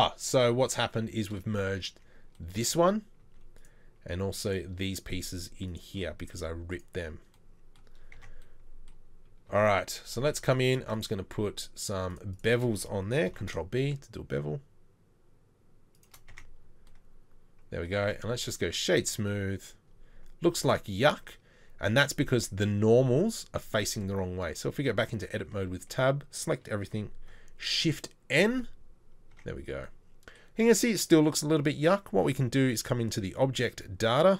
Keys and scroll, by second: 3.2 z, 6.3 z, 8.1 Tab, 9.5 Tab, 13.3 ctrl+b, 16.3 Tab, 18.0 Tab, 18.0 space, 24.5 Tab, 25.4 a, 28.4 shift+n, 29.3 Tab.